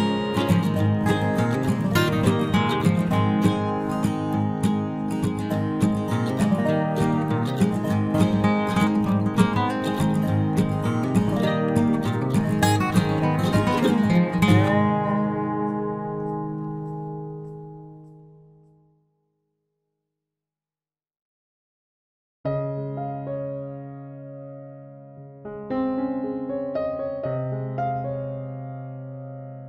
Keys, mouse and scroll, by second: 0.4 k, 9.3-11.2 middle drag, 9.6 ctrl+Tab, 11.9 c, 18.5-23.6 right drag, 19.0 ctrl+r, 25.5 z, 28.2-29.6 right drag, 28.5 c.